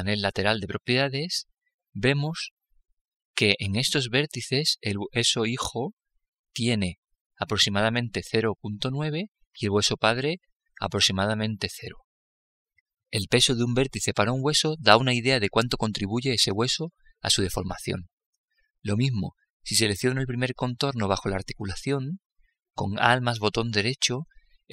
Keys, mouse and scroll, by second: 6.8-8.8 drag, 21.6-24.7 right drag.